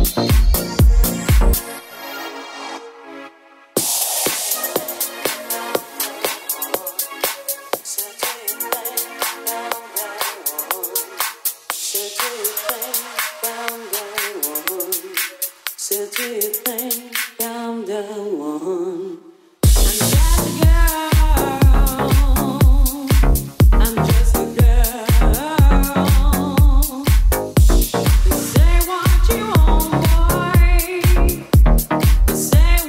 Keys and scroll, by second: 0.0 Return, 0.4 Up, 1.2 Down, 1.7 Up, 2.2 Down, 2.6 Up, 4.3 Left, 4.7 Right, 5.8 Down, 6.1 Up, 6.9 Down, 7.4 Down, 7.6 Up, 9.8 Down, 10.5 Up, 11.6 super+s, 13.7 super+c, 15.5-16.4 typing, 23.3 BackSpace, 28.2 Up, 28.4 Down, 28.8 Left, 32.1 Up, 32.4 Down.